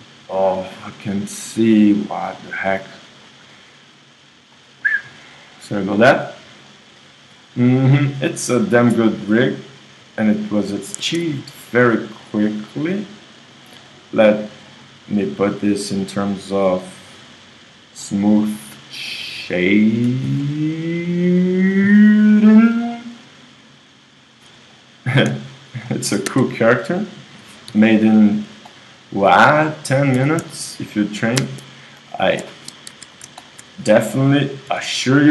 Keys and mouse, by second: 6.1 click, 6.6 middle click, 7.0-8.4 middle drag, 8.4-10.3 right drag, 10.4-13.8 right drag, 14.6-16.6 drag, 16.8 right click, 18.6-22.8 drag, 22.8 middle click, 23.2-25.9 drag, 25.9 middle click, 26.4 KP_1, 27.7 g, 30.1 r, 32.1-33.6 drag, 32.9 KP_1, 34.7 g.